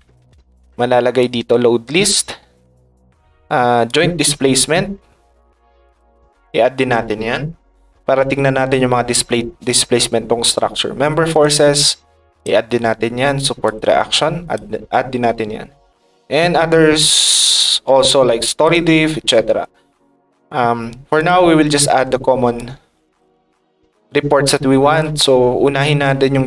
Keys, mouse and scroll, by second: 1.2 ctrl+click, 3.8 click, 5.8 click, 11.3 click, 12.3 click, 13.6 click, 14.4 click, 18.6 click, 21.1 click, 22.5 ctrl+click, 24.9 click.